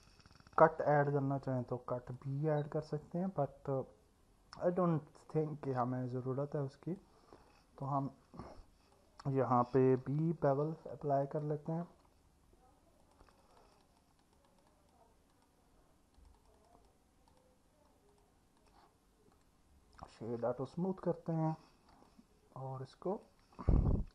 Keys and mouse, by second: 1.6 click, 3.5-5.7 alt+middle drag, 6.7 click, 7.5 alt+middle click, 8.9-11.4 drag, 13.2 click, 13.4 click, 13.6 click, 14.2 click, 14.5 click, 14.7 click, 16.4 click, 16.6 click, 16.8 click, 17.3 click, 18.1-18.7 drag, 19.4 right click, 22.1-23.3 alt+middle drag.